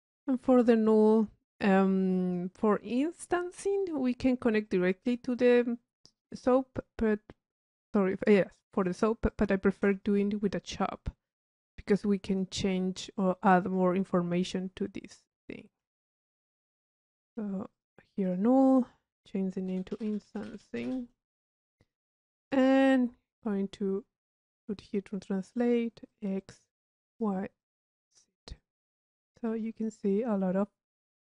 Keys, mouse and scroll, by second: 1.6 middle click, 2.1 drag, 3.3 click, 4.7 click, 5.4-7.1 drag, 7.1-8.2 middle drag, 9.5 click, 9.9 Tab, 11.7 click, 12.3-14.1 drag, 15.3-15.9 drag, 16.6 u, 17.9-19.1 drag, 21.7 click, 22.4 click, 23.4-24.8 drag, 26.1 click, 26.7 click, 27.2 click, 27.6 click, 28.1 click, 28.6 drag, 29.5 click.